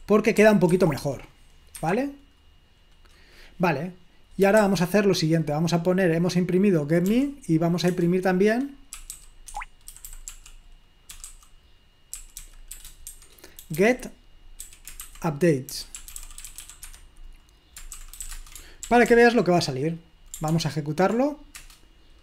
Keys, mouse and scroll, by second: 0.0-0.9 typing, 1.8 Escape, 7.1 p, 8.0 BackSpace, 9.0-11.1 typing, 12.2-18.8 typing, 18.9 ctrl+p, 19.1 ctrl+p, 20.5 ctrl+p, 21.6 Return.